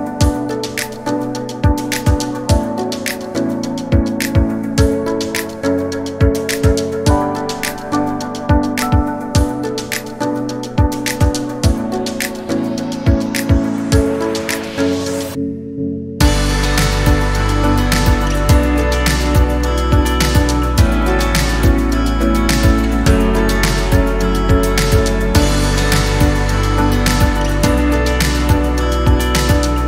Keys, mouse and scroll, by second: 0.0 scroll up 4, 0.1 shift+middle click, 0.6 g, 1.2 r, 2.0 shift+middle click, 2.4 KP_1, 2.6 scroll down 6, 2.7 shift+middle click, 3.3-3.7 scroll up 3, 3.4 shift+middle click, 3.7 g, 4.5-5.0 scroll down 5, 5.0 scroll up 1, 5.4 click, 5.9-6.2 scroll down 1, 6.2 middle click, 6.3 Tab, 6.5 middle click, 7.1 Tab, 7.2 middle click, 7.3 scroll down 1, 7.4 scroll up 1, 7.5 shift+middle click, 8.2 l, 8.4 l, 8.7 KP_7, 9.0 scroll down 7, 9.1 shift+middle click, 9.2 scroll up 4, 10.4-11.6 drag, 11.9 click, 16.6 click, 16.8 middle click, 17.0 scroll up 3, 17.6 Delete, 18.3 middle click, 18.4-19.1 scroll down 4, 18.7 Tab, 18.8 middle click, 19.1 middle click, 19.4 scroll up 1, 19.6 Tab, 19.8 middle click, 20.3 click, 20.5-20.9 scroll up 4, 20.7 middle click, 21.1 alt+click, 21.6 click, 22.1 alt+click, 22.3 middle click, 22.7 scroll down 2, 22.9 middle click, 23.3 click, 23.5 scroll up 2, 23.6 middle click, 24.1 scroll up 1, 24.3 middle click, 24.8-26.3 right drag, 26.3 middle click, 27.1 scroll down 1, 27.2 middle click, 27.8 click, 28.3-29.8 drag.